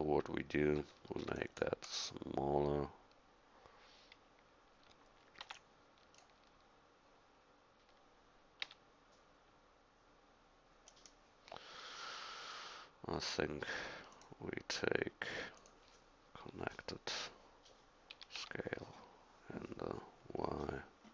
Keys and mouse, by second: 0.6 a, 1.2 c, 5.4 b, 8.6 s, 18.1 s.